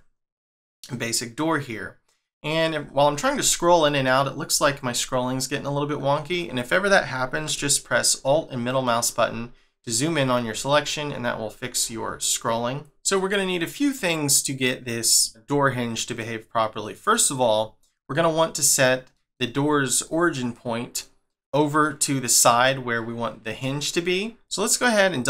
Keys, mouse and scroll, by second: 1.3 middle click, 2.5 scroll down 1, 3.1 scroll up 1, 4.1-4.6 scroll down 10, 5.5 scroll up 1, 8.6 scroll up 9, 8.8 alt+middle click, 10.3 scroll down 2, 10.9 scroll down 7, 11.0 scroll up 3, 11.7 scroll down 1, 11.9 scroll up 1, 12.2 scroll down 1, 12.4-12.9 scroll up 4, 13.2 middle click, 15.9 middle click, 17.3 scroll up 2, 18.0 middle click, 19.2 middle click, 23.6 middle click, 24.3 Tab.